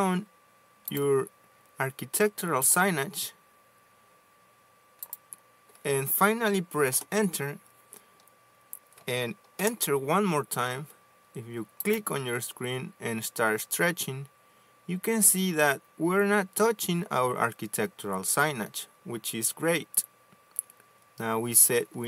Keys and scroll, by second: 7.9 Return.